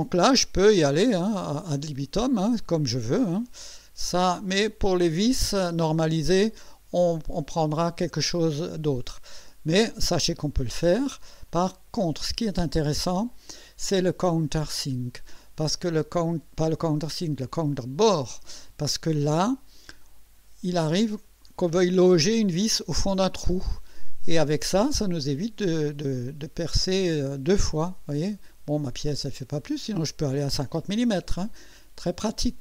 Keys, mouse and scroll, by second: 0.7 scroll up 1, 1.3-1.6 scroll up 2, 1.8-2.1 scroll up 2, 2.5 scroll up 2, 3.1-3.9 scroll down 4, 4.0 scroll up 2, 4.2 scroll down 2, 5.1 scroll down 2, 11.5 click, 14.3 click, 16.6 click, 17.8 click, 19.2 scroll up 1, 19.8 scroll up 1, 20.4 scroll up 1, 20.9 scroll up 1, 21.5-21.8 scroll up 1, 22.6 click, 26.3-26.6 scroll up 1, 26.9-27.3 scroll down 2, 28.1 scroll up 2, 28.9-29.4 scroll down 4, 29.5 scroll up 2, 31.2-31.5 scroll down 2, 32.0 click.